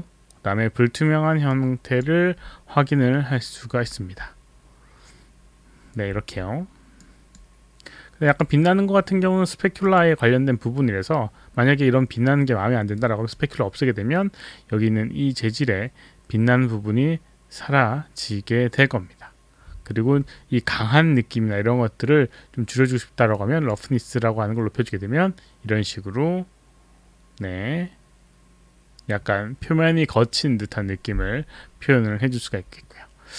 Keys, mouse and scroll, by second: 1.5 click, 7.0 click, 8.3 click, 9.8 click, 12.9 click, 23.3 click.